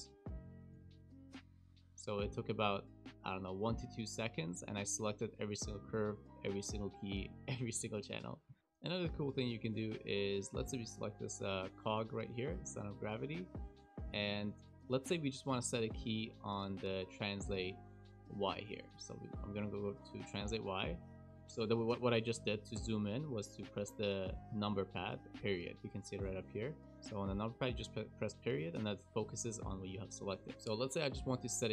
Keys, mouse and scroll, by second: 0.4 a, 0.8 a, 4.5 shift+middle click, 5.3 middle click, 7.7 middle click, 8.4 shift+middle click, 8.6 click, 8.6 middle click, 8.6 scroll up 1, 8.8 click, 9.4 shift+middle click, 9.8 scroll up 1, 10.2 shift+middle click, 10.6 middle click, 12.0 click, 12.6 shift+middle click, 13.9 click, 14.6 click, 16.8 w, 18.6 click, 18.8 click, 20.3 KP_Decimal, 20.8-21.4 scroll down 13, 21.3 shift+middle click, 24.4 KP_Decimal, 28.5 KP_Decimal, 29.2-30.4 scroll down 13, 30.4 scroll down 5, 30.5 shift+scroll up 1, 30.5 shift+middle click, 30.5 shift+middle click.